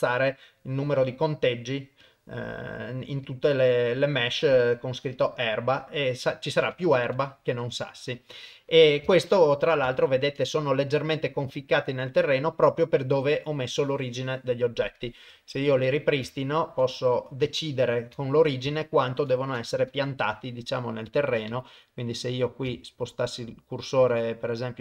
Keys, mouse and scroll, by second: 0.9 drag, 2.0 click, 3.3-4.4 drag, 5.2 click, 5.6-7.0 middle drag, 7.1 KP_0, 8.0 KP_0, 8.4 middle click, 9.1 shift+middle click, 9.9 ctrl+middle click, 10.4-13.7 middle drag, 15.0 click, 15.4 shift+middle click, 16.3 ctrl+middle click, 16.9 click, 17.2 middle click, 17.9 click, 18.3 ctrl+middle click, 18.7 shift+middle click, 19.9 KP_1, 21.1 click, 22.8 shift+right click, 24.6 shift+right click.